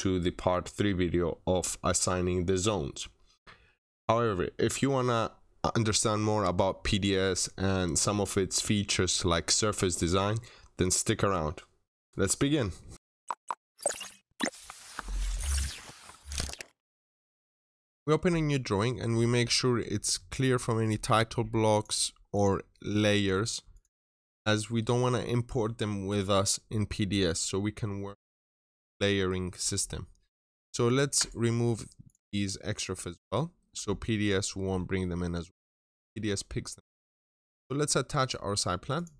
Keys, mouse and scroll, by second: 18.0 double click, 21.6 click, 23.6 click, 30.5 click, 30.7 shift+click, 31.0 shift+right click, 31.0 click.